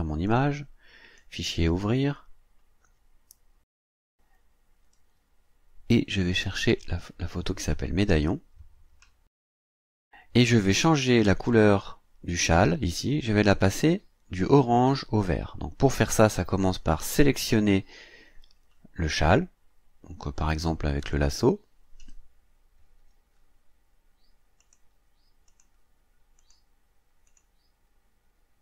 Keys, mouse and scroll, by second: 0.3 click, 1.2 click, 4.3-4.6 scroll up 1, 4.7-5.1 scroll down 1, 6.5 click, 8.1 click, 10.1-10.5 ctrl+scroll up 2, 21.0 click, 24.6 click, 25.5 click, 26.4 click, 27.3 click.